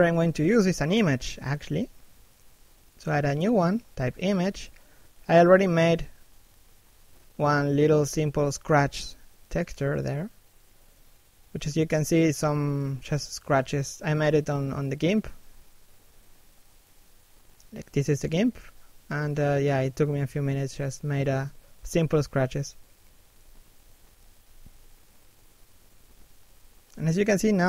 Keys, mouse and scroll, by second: 24.0 f, 25.2 scroll up 1, 25.4 f, 27.3 right click.